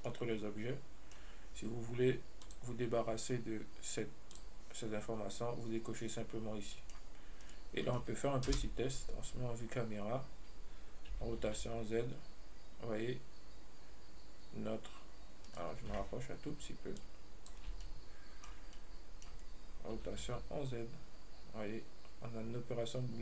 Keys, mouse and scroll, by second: 2.7-5.7 drag, 7.0 middle click, 7.7 right click, 8.8 KP_0, 9.5 scroll up 3, 11.4 r, 17.2-18.1 drag, 18.1-20.2 ctrl+middle drag, 20.2 r.